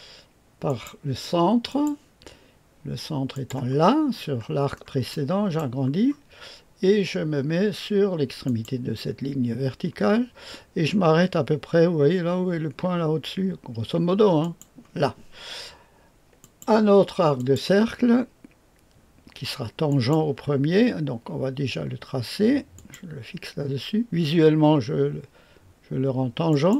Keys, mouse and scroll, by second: 0.6 click, 1.7 middle click, 1.8 click, 3.3 middle click, 3.5 click, 4.1-5.6 scroll up 1, 5.1 middle click, 5.6 right click, 6.0-7.1 scroll up 1, 8.4 click, 14.4 click, 16.4 click, 17.3 click, 19.8 click, 22.7 click, 26.5 click.